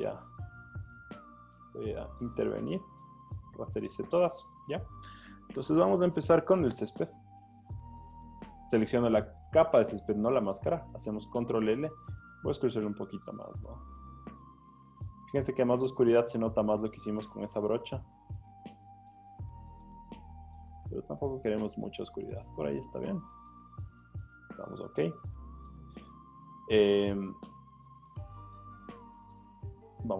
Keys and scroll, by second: 10.3 super+l.